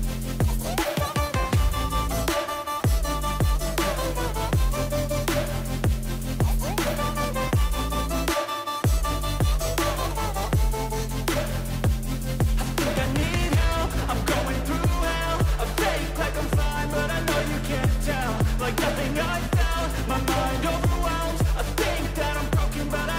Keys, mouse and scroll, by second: 2.3 right click, 6.1 click, 6.3-9.5 drag, 14.7 ctrl+t.